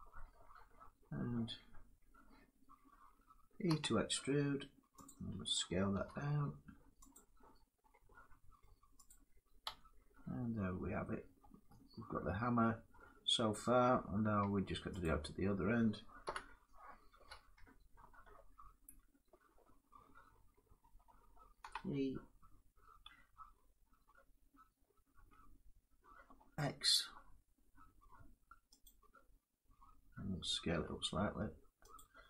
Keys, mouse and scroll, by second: 0.5 middle click, 3.4 e, 4.7 click, 4.7 e, 6.8 click, 8.3 middle click, 8.8 click, 9.4 Tab, 9.7-10.1 drag, 9.7 scroll, 10.3-10.7 drag, 10.8 middle drag, 11.1 Tab, 11.1 drag, 11.1 scroll, 11.4 scroll down 2, 12.5 middle click, 13.1 Tab, 13.5 Tab, 14.2 Tab, 14.8 click, 15.4 middle click, 15.9 7, 17.9 shift+middle click, 18.2 scroll up 4, 23.5 e, 24.8 x, 28.5-30.4 drag, 30.4 s, 31.6 click.